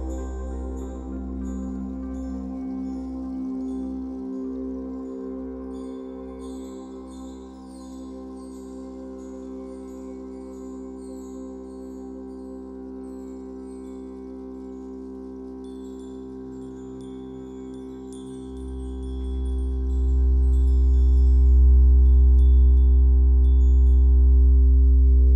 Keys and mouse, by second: 1.2 ctrl+s, 2.0 n, 2.1 ctrl+alt+click, 2.7 alt+click, 4.3 alt+shift+click, 4.9-7.6 alt+drag, 7.6-9.3 typing, 8.5-10.9 alt+shift+drag, 11.5-14.1 alt+drag, 14.1 r, 14.5 z, 15.9 click, 17.2 click, 18.6 1, 19.5 click, 20.2 alt+middle click, 21.0 shift+click, 21.8 shift+click, 22.7 g, 22.9 x, 25.2-25.3 drag.